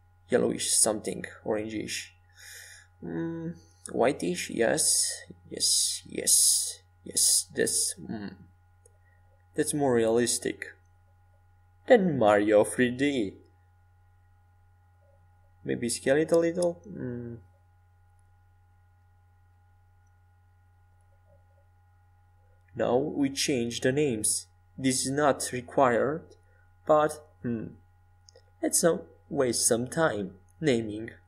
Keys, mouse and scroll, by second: 6.6-8.6 middle drag, 15.2 Tab, 16.7 s, 19.8 a, 20.3 Escape, 21.7 Escape, 22.5-23.5 middle drag, 26.3-28.9 drag, 29.3 BackSpace, 29.5 BackSpace, 29.8 BackSpace.